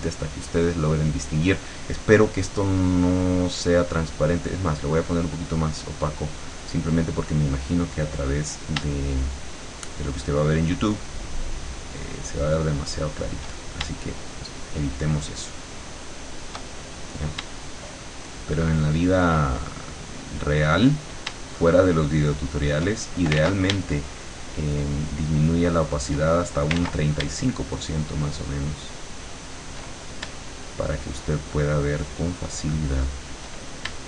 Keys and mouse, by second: 1.6-6.5 drag, 7.1 click, 9.6-13.4 shift+drag, 14.2-16.7 shift+drag, 18.5-21.0 shift+drag, 21.7 shift+click, 23.4 ctrl+z, 24.6-26.2 shift+drag, 26.8 ctrl+z, 28.1-29.7 shift+drag, 30.9-33.4 shift+drag.